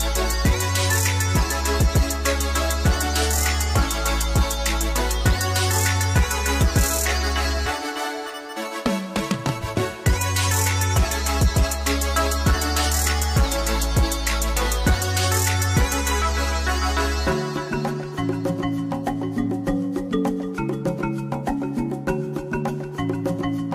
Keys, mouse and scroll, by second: 0.1 click, 0.2 middle click, 0.2 s, 0.7 shift+middle click, 1.0 e, 1.0 click, 1.0-2.1 middle drag, 1.0 scroll down 2, 1.7 Tab, 1.9 right click, 2.1 click, 2.3 middle click, 2.4 shift+z, 3.0 click, 3.1 middle click, 3.2 click, 3.3 middle click, 3.4 Tab, 3.5 alt+a, 3.5 click, 3.6 middle click, 3.8 ctrl+z, 4.0 KP_1, 4.2 b, 4.7 KP_Enter, 4.7 click, 4.8 Tab, 4.9 middle click, 5.0 middle click, 5.1 shift+click, 5.2 middle click, 5.5 b, 5.7 scroll down 1, 5.9 middle click, 6.1 click, 6.1 scroll up 2, 6.2 click, 6.3 ctrl+s, 6.7 h, 6.8 scroll down 1, 7.2 middle click, 7.3 scroll up 2, 7.4 KP_0, 7.5 shift+click, 7.6 g, 7.7 click, 7.8-9.3 middle drag, 9.3 scroll up 2, 9.3 click, 9.4-12.4 shift+middle drag, 12.3 scroll up 1, 12.4 shift+right click, 12.5 s, 12.6 click, 12.8 g, 12.9 right click, 13.2 click, 13.3 middle click, 13.5 a, 14.0 scroll down 1, 14.1 middle click, 14.1 KP_0, 14.1 scroll up 1, 14.5 middle click, 14.5 Tab, 14.7 ctrl+r, 14.7 right click, 15.0 shift+click, 15.2 alt+click, 15.4 middle click, 15.4 Tab, 15.8-19.5 typing, 16.1 right click, 16.2 Tab, 16.4 click, 16.8 middle click, 17.2 scroll up 2, 17.5 middle click, 18.0 scroll down 1, 18.4 shift+right click, 18.5 middle click, 18.6 scroll down 1, 18.7 Tab, 18.9 shift+middle click, 19.2 click, 19.3 Tab, 19.6 right click, 19.7 ctrl+z, 20.0 alt+m, 20.0 right click, 20.2 shift+middle click, 20.5 click, 20.6 e, 20.7 shift+middle click, 21.0 click, 21.1 shift+d, 21.4-23.3 shift+middle drag, 21.4-22.0 scroll down 2, 22.0-22.5 scroll up 1, 22.7 Tab, 23.3 click, 23.4 g, 23.5 scroll down 1, 23.6 shift+middle click.